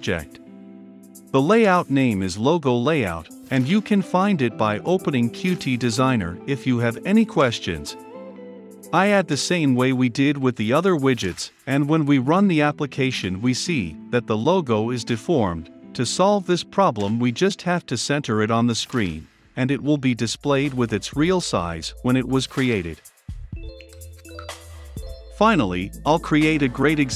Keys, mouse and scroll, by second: 1.2 o, 1.7 Down, 2.0 Return, 2.7 >, 4.5 Return, 5.2 shift+9, 5.9 s, 6.5 Return, 7.1-8.2 typing, 7.9 Return, 8.6 Return, 10.5 ctrl+F5, 14.2-15.2 drag, 15.2-18.5 typing, 17.2 Return, 19.8 a, 19.9 l, 20.2 Return, 20.8 ctrl+F5, 22.8-25.0 drag, 25.3-27.1 drag.